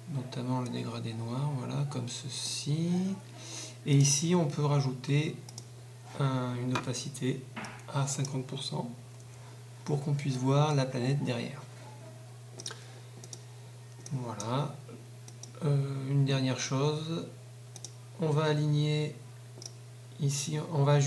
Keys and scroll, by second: 9.2 Caps_Lock.